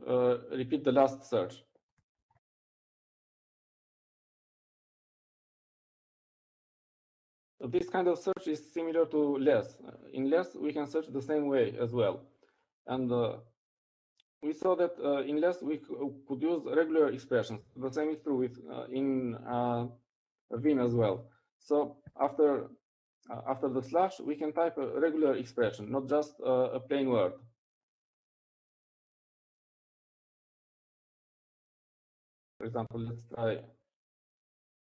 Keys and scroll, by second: 24.7 Up, 24.7 typing.